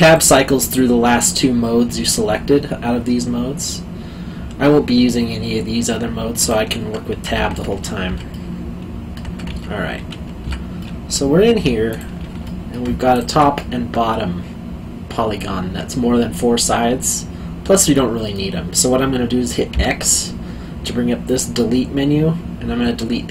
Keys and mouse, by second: 6.4 click, 7.2 Tab, 8.3 middle click, 9.4 Tab, 10.8 middle click, 11.5 3, 11.9 click, 12.4 middle click, 13.1 shift+click, 13.5 middle click, 19.7 x.